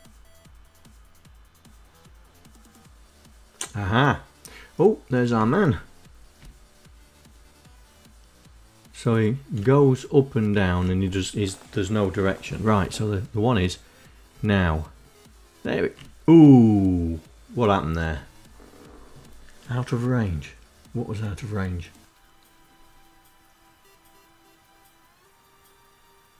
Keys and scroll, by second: 4.4 Down, 7.6 Up, 8.8 Down, 10.7 Down, 12.3 Right, 13.4 Down.